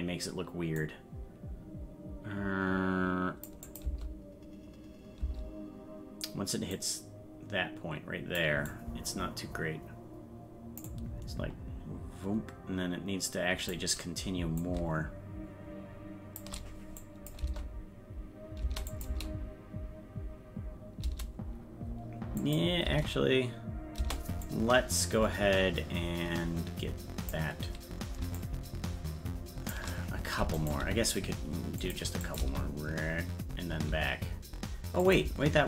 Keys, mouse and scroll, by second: 0.8-3.5 drag, 3.7 click, 4.7 space, 6.8-8.4 drag, 6.8 space, 8.7-10.8 drag, 10.9-13.7 drag, 14.6-16.4 drag, 17.0 click, 17.4 space, 18.9 click, 18.9 space, 22.4 click, 22.8 space, 24.5-27.3 drag, 28.4-29.7 shift+drag, 30.6 right click, 30.8 g, 32.3 click, 35.0 click, 35.0 space, 35.2 space.